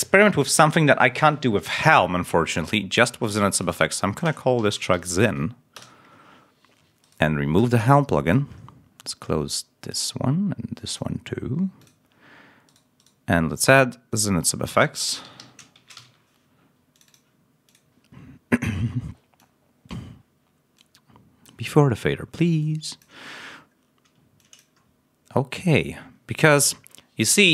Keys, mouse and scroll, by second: 2.4 click, 3.4 click, 4.5 shift+y, 4.8 shift+z, 5.0 shift+n, 5.6 Return, 6.9 right click, 8.1 click, 9.8 click, 10.9 click, 11.7 click, 14.8-15.8 typing, 16.8 click, 17.6 click, 19.3 click, 20.7 click, 22.5 click, 24.3 click.